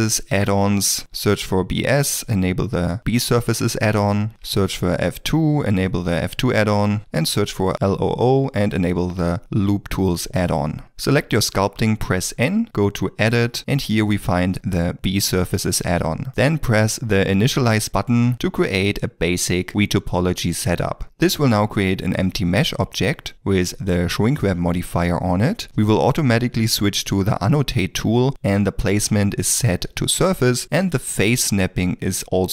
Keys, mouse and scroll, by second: 1.0 b, 1.3 s, 4.3 f, 4.7 2, 7.1 l, 7.4 o, 12.0 n.